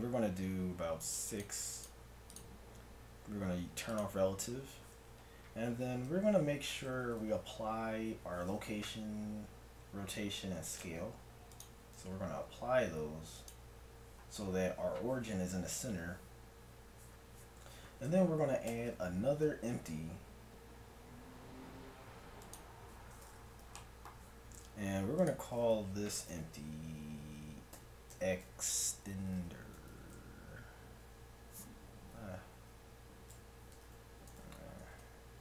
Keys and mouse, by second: 1.0-5.9 drag, 6.1 KP_1, 7.0 n, 10.8 ctrl+a, 12.1 ctrl+a, 18.7 shift+a, 24.0-27.1 middle drag, 34.9 BackSpace.